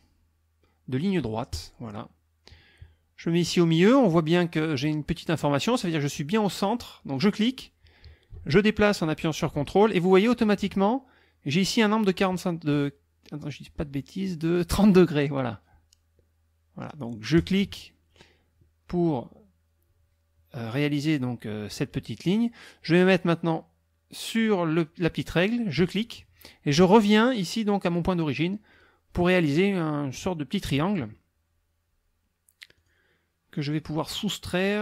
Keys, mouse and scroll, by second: 1.5 click, 7.1 click, 17.4 ctrl+click, 25.8 click, 28.7 click, 32.8 click.